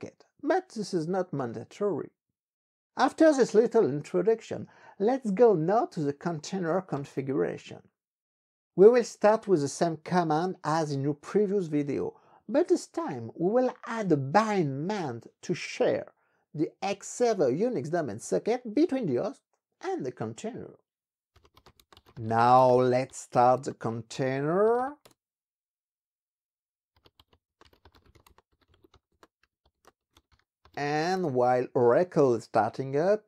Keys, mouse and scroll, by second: 6.9 ctrl+b, 7.0 3, 7.3 Return, 21.0-25.1 typing, 26.6-31.1 typing.